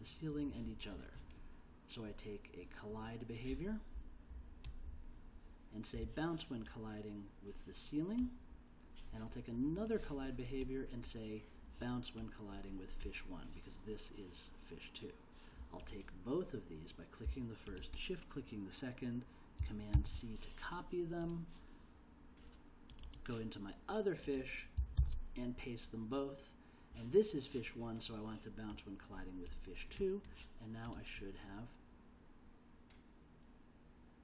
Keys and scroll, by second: 19.9 super+c, 25.0 super+v.